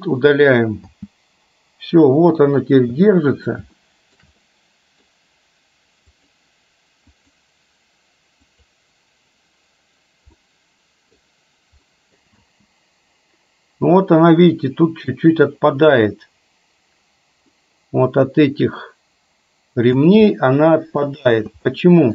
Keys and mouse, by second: 1.0 space, 2.8 space, 3.8-4.3 shift+middle drag, 4.5-5.1 middle drag, 6.2 click, 7.2 click, 8.6 click, 10.5-11.2 middle drag, 12.0 middle click, 12.3 space, 17.6-20.0 middle drag, 20.3-21.1 middle drag, 21.3 space, 21.7-22.1 middle drag.